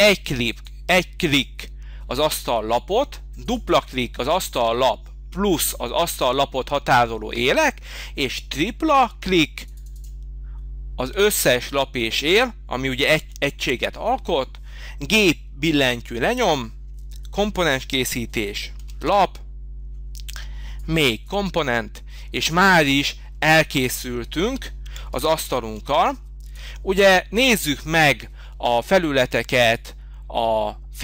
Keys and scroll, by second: 16.3 g, 25.7 h, 29.1 h.